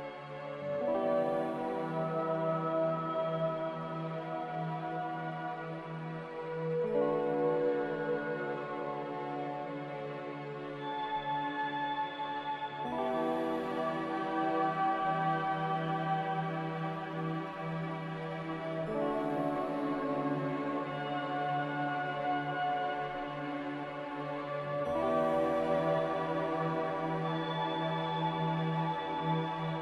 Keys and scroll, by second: 15.0 b, 16.7-18.7 typing, 26.8 ctrl+c.